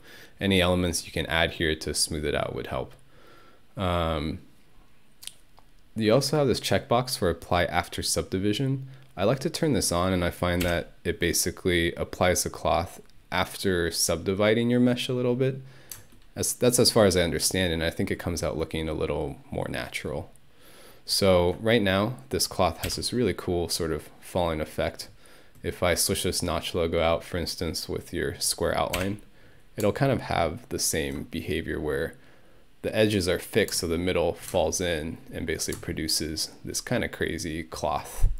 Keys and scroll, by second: 10.7 Home, 22.9 Home, 29.0 Home.